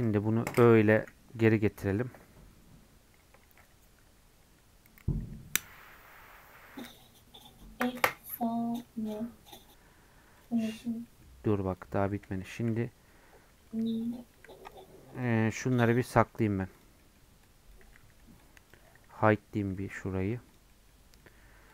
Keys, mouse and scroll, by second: 1.0 /, 10.6-11.7 middle drag, 11.7 click, 12.1 scroll up 1, 12.4-14.0 shift+middle drag, 14.0-16.1 shift+drag, 16.1 middle click, 16.3 scroll down 2, 17.0-18.7 middle drag, 18.7 click, 19.1 h, 19.7 middle click, 19.9-20.8 scroll up 3, 20.8 middle click, 21.0 scroll up 1, 21.2 middle click.